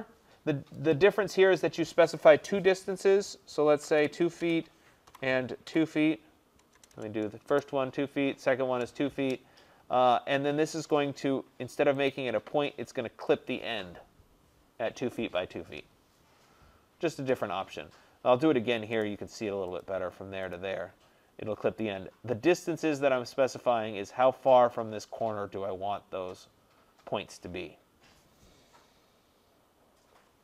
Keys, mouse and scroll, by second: 1.0 click, 4.0-5.7 typing, 6.8 BackSpace, 7.5 Return, 7.5 BackSpace, 8.8 Return, 11.0 click, 12.2 click, 18.3 middle click, 18.4 middle click, 18.5 middle click, 18.6 middle click, 19.1 right click, 19.9 click, 20.6 click, 21.1 middle click, 21.1 middle click, 21.9-24.6 scroll up 5.